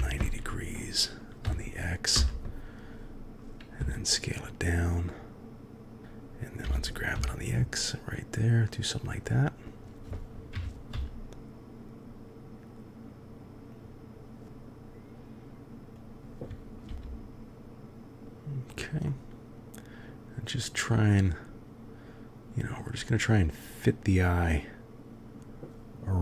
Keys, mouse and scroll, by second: 3.7 s, 6.6 g, 10.5 KP_3, 10.9 g, 14.4 s, 16.8 g, 19.1-22.8 drag.